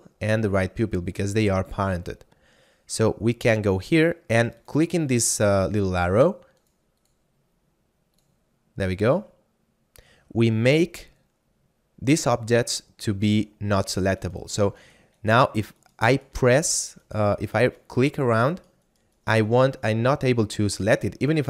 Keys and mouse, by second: 4.5 click, 14.3 right click, 20.0 middle click.